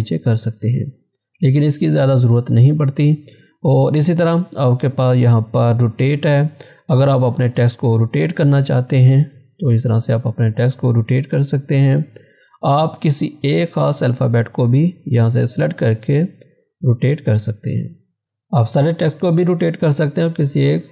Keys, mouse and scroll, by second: 0.8 click, 7.1 click, 7.1 click, 12.3-16.4 drag, 18.5 click.